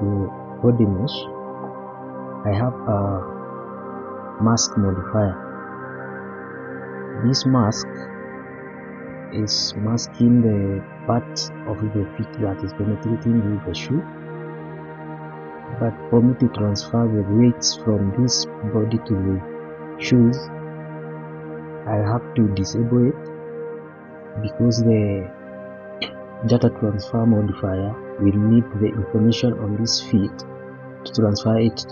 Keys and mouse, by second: 0.5-1.2 middle drag, 4.2 click, 6.4-7.0 middle drag, 14.2 click, 15.7 shift+middle drag, 20.8-22.0 middle drag.